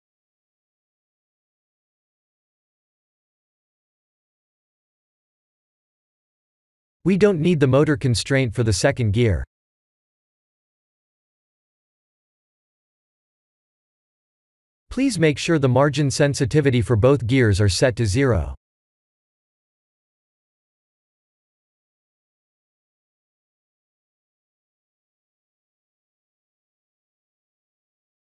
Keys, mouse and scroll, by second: 0.1 click, 1.3 click, 2.8 shift+d, 7.7 shift+middle click, 8.3 middle click, 8.8 middle click, 9.2 click, 9.7 x, 11.6 click, 13.5-14.6 scroll down 5, 14.6 click, 14.6 scroll down 4, 15.4 click, 18.2 click, 19.6 click, 22.2 click, 22.9 click, 23.4-25.4 scroll down 1, 25.4 click, 25.4 scroll down 4, 25.4-26.1 scroll up 5, 26.2 shift+middle click, 26.6 middle click, 28.2 click.